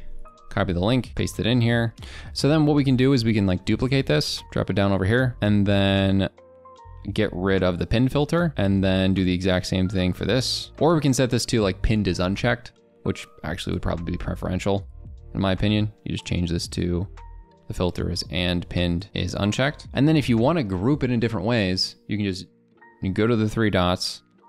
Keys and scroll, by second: 1.1 ctrl+v.